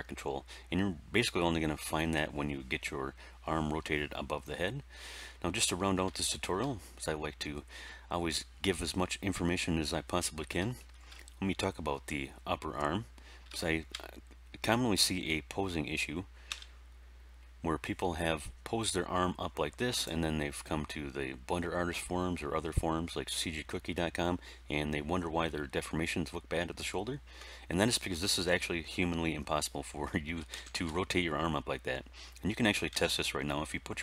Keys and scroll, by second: 16.4 r, 30.3 alt+r, 30.4 alt+g, 30.6 alt+s, 32.8 r.